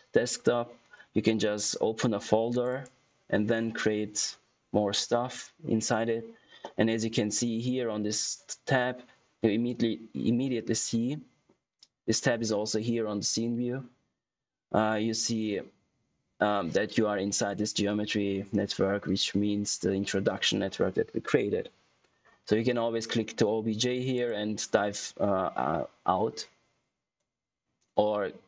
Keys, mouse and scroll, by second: 2.9 click, 24.1 click.